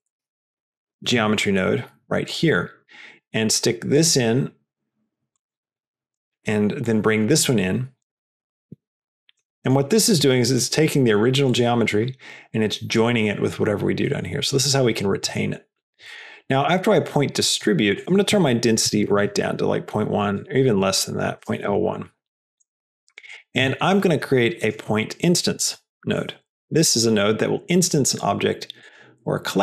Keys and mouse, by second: 3.1-3.9 drag, 5.2-6.1 drag, 6.8-7.9 drag, 8.5-9.0 drag, 9.6 middle drag, 10.6 click, 12.4 click, 14.0 middle click, 14.6 click, 15.2 middle click, 15.6 click, 16.0 middle click, 16.4 click, 17.3 middle click, 18.0-19.6 drag, 20.1 click, 20.5-22.0 drag, 22.9 click, 23.5 shift+a, 26.5 Down.